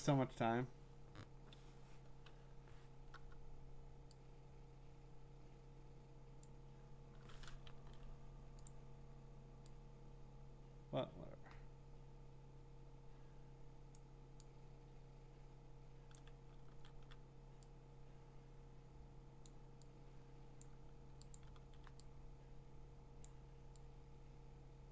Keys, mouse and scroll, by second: 3.1 j, 6.4 click, 7.8 ctrl+d, 8.7 click, 13.9 click, 16.1 click, 16.7 ctrl+d, 19.4 click, 20.6 click, 21.3 click, 21.6 ctrl+d, 23.2 click.